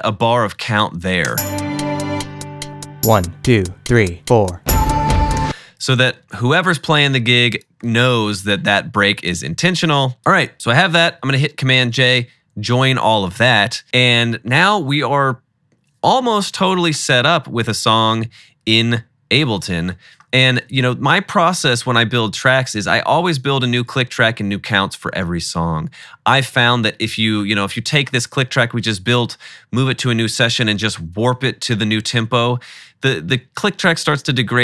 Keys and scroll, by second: 1.3 space, 5.6 space, 11.0 super+j.